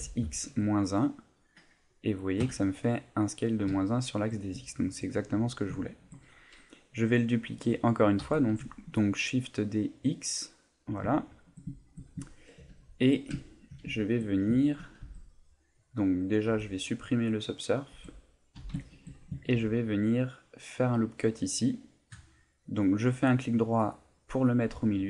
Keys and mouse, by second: 3.8 shift+middle click, 8.2 shift+d, 10.7 click, 11.1 shift+middle click, 12.3 ctrl+middle click, 12.8 shift+middle click, 13.4 ctrl+middle click, 13.9 shift+middle click, 15.0 Tab, 16.5 Tab, 17.4 click, 17.9 Tab, 18.8 shift+middle click, 19.4 ctrl+r, 23.9 right click.